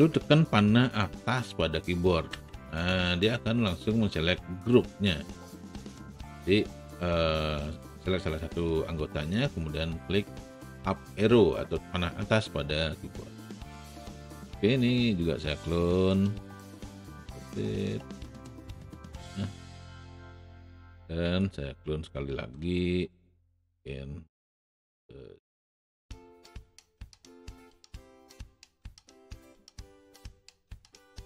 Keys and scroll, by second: 2.4 Up, 16.9 e, 21.2 alt+w, 27.8 shift+e.